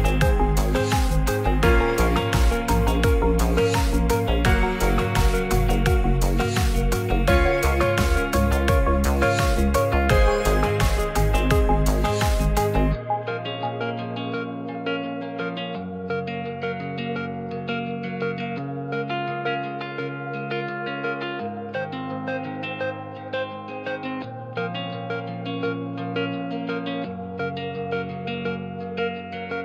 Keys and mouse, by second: 1.9-3.4 drag, 8.3 click, 10.3 click, 11.3 click, 13.7 ctrl+click, 16.5 click, 17.1 click, 17.3 middle click, 18.6 shift+middle click, 19.5-20.1 shift+middle drag, 20.3-24.9 shift+middle drag, 24.0 Tab, 25.9 click, 26.4 click.